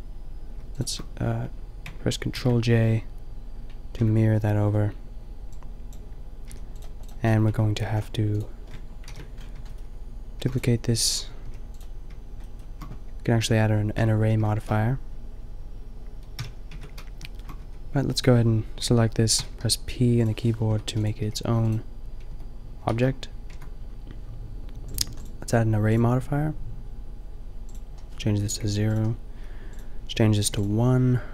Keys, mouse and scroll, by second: 2.3 ctrl+j, 4.0 Tab, 4.6 Tab, 6.4 a, 7.5 Tab, 9.1 ctrl+l, 10.4 shift+f, 11.5 g, 13.4 Tab, 14.0 Tab, 16.4 n, 16.8 Tab, 17.7 Tab, 19.4 p, 20.8 Tab, 21.2 g, 22.3 Tab, 22.9 shift+s, 23.5 Tab.